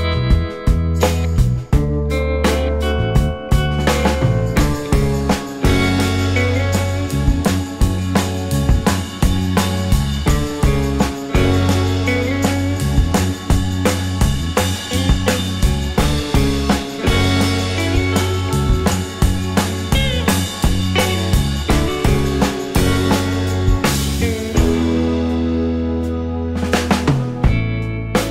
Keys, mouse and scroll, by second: 21.9 ctrl+click, 23.0 space, 23.8 scroll up 1, 24.5 alt+click, 24.9 alt+middle click, 25.5 alt+click, 26.0 w, 26.4 right click, 27.7 typing.